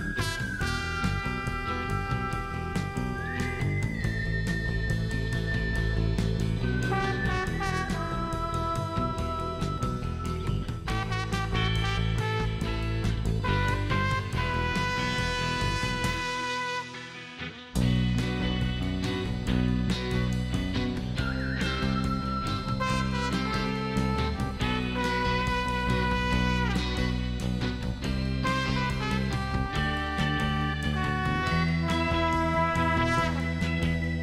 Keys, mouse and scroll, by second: 1.2 click, 3.0 middle click, 5.1 click, 7.5 shift+middle click, 8.0 shift+right click, 11.4 shift+right click, 12.3 shift+right click, 13.3 shift+middle click, 14.4 click, 15.0 space, 15.7 shift+right click, 16.6 shift+right click, 20.8 shift+scroll up 2, 21.2 middle click, 21.5 shift+right click, 23.1 shift+middle click, 23.5 shift+right click, 25.5 shift+scroll down 2, 25.9 shift+right click, 26.7 shift+right click, 27.2 shift+middle click, 28.5 click, 29.7 click, 29.9 space, 30.1 right click, 30.5 click, 31.4 middle click, 31.8 scroll up 1, 32.3-33.3 middle drag.